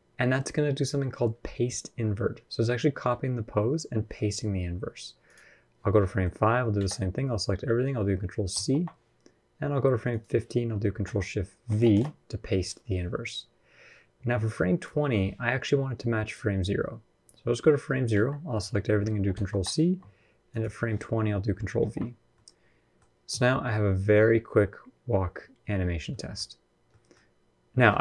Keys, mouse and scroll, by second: 5.0 click, 5.8 middle click, 6.2-6.5 scroll up 1, 6.5 a, 8.3 ctrl+c, 9.9 click, 11.4 ctrl+shift+v, 14.2 click, 17.9 a, 19.1 ctrl+c, 20.3 click, 21.6 ctrl+v, 22.1 middle click, 23.0 space, 25.9 middle click, 26.5 scroll up 1, 26.7 middle click.